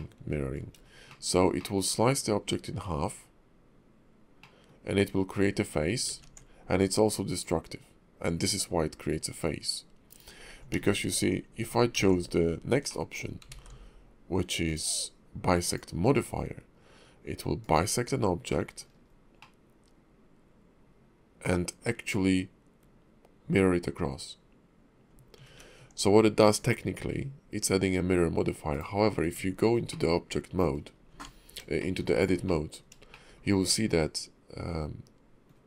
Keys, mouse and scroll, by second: 0.7 scroll up 3, 1.1 shift+middle click, 1.6 middle click, 2.9-3.9 scroll down 3, 4.4 middle click, 6.1 ctrl+`, 10.4 scroll down 2, 10.7 ctrl+z, 12.9 middle click, 13.5 alt+x, 14.6 click, 17.6 click, 18.5 middle click, 18.9-19.4 scroll up 2, 19.4 middle click, 25.5 ctrl+`, 29.2 Tab, 29.9 middle click, 30.8 scroll up 2, 31.1 Tab, 31.8 shift+middle click, 32.1-32.5 scroll up 2, 32.5 middle click, 33.1 shift+middle click, 33.6 middle click.